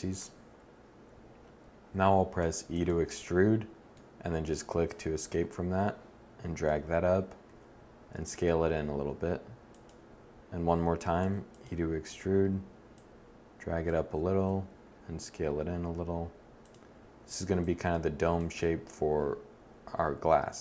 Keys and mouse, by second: 2.2 e, 7.3 s, 11.0 e, 11.4-13.1 drag, 14.1 s, 16.5 click, 19.4 click.